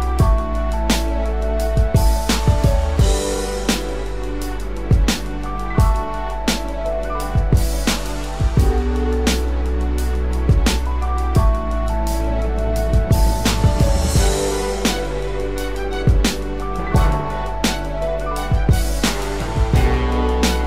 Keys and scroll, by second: 0.8 ctrl+=, 5.5 ctrl+z.